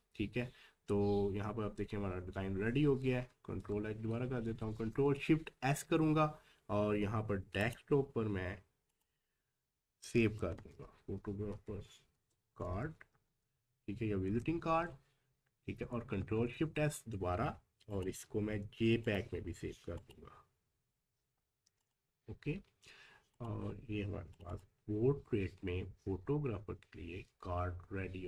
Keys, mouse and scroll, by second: 3.1 ctrl+h, 4.7 ctrl+shift+s, 7.0-7.6 scroll up 1, 7.6 click, 10.0 p, 11.5-12.4 typing, 14.3 Return, 15.9-16.7 typing, 17.9 click.